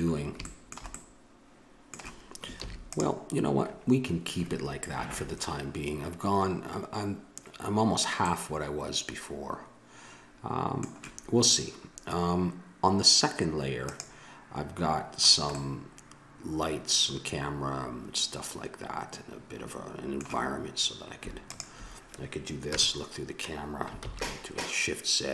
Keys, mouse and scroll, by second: 2.6 ctrl+s, 13.8-14.9 drag, 14.9-17.5 middle drag, 21.5-22.7 drag, 22.7 KP_0, 24.6 shift+z.